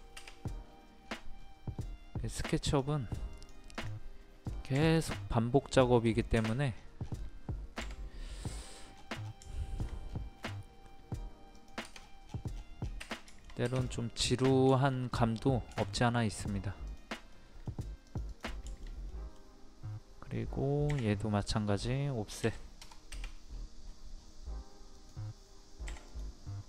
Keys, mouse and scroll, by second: 0.6-1.0 scroll up 1, 2.6 click, 6.7 scroll down 1, 8.6 click, 8.9 scroll down 1, 9.5 shift+middle click, 10.0 scroll up 1, 11.5 click, 12.0 scroll down 1, 12.0 scroll up 1, 12.2 scroll down 1, 12.9 scroll up 1, 13.3 middle click, 13.7 click, 14.2 middle click, 16.2 scroll up 1, 16.9 click, 17.3 middle click, 18.0 click, 18.7-20.1 shift+middle drag, 20.9 o, 21.4 click, 22.4 KP_2, 23.5-23.9 scroll up 1, 24.9 click, 25.6 scroll down 1, 26.1 click.